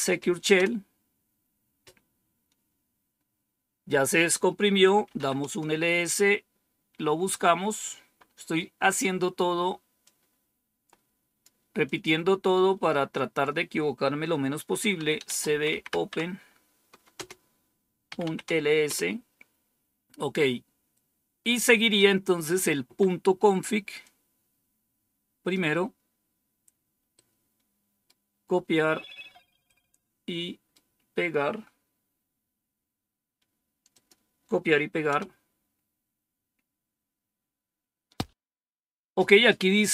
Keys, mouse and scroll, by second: 0.5 typing, 4.8-5.6 typing, 9.9-11.3 drag, 11.8 click, 11.8 typing, 12.7-13.1 scroll down 2, 14.6-18.5 typing, 18.8 Return, 23.9-25.5 drag, 27.0 right click, 29.6-30.6 right drag, 33.8 click, 35.0 Return.